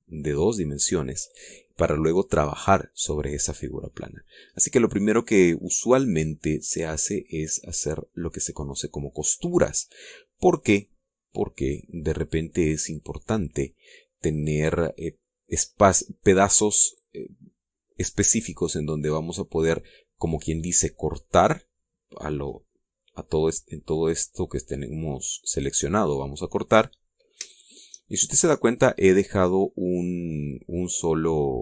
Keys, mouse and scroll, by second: 4.5-4.9 scroll down 2, 5.0 scroll up 2, 6.4-7.0 scroll down 2, 7.2-7.6 scroll up 2, 7.8-8.2 scroll down 2, 9.3-15.9 middle drag, 23.1 click, 25.5 click, 26.6 click, 28.0 shift+click, 28.6-30.1 shift+drag, 30.1 middle click, 31.3 middle click.